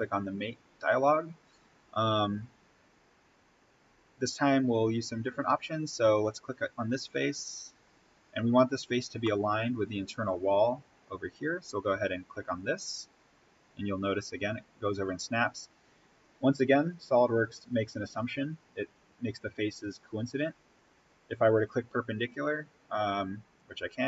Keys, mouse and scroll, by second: 5.5-6.0 scroll down 1, 6.2 click, 6.8-7.3 scroll up 1, 9.2-12.5 middle drag, 12.5 click, 23.9 click.